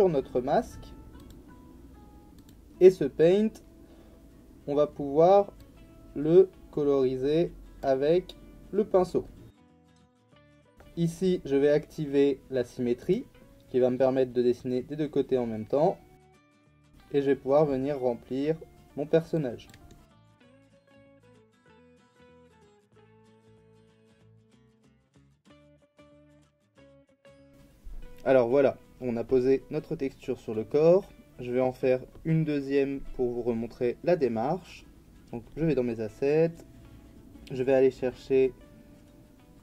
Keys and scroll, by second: 9.6 ctrl+z, 24.4 x.